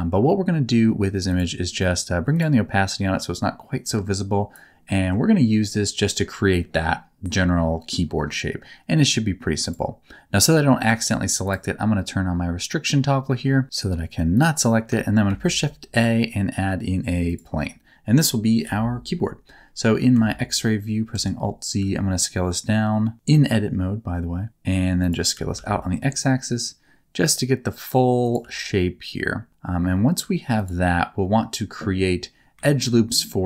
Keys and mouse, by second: 1.3 click, 2.3 click, 2.9-4.5 drag, 4.9 middle click, 9.8-12.9 drag, 14.3 click, 15.3 shift+a, 18.6 KP_7, 20.1 alt+z, 21.1 Tab, 21.8 s, 25.0 click, 25.3 s, 25.5 x, 28.2 click, 28.4 s, 30.6 click.